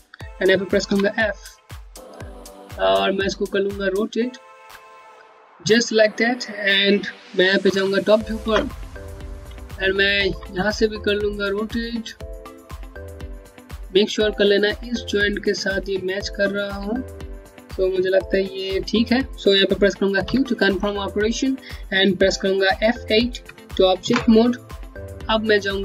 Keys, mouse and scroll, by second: 0.6 f, 1.2 scroll down 1, 4.1 click, 7.5 click, 8.4 space, 9.4 middle click, 11.2 click, 19.9 q, 23.1 ctrl+Num_Lock, 25.2 space.